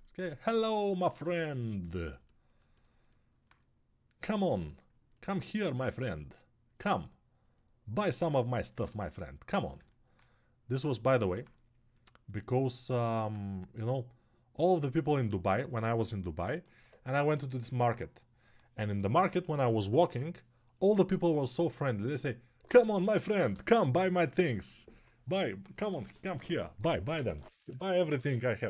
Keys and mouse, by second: 2.6-10.8 alt+drag.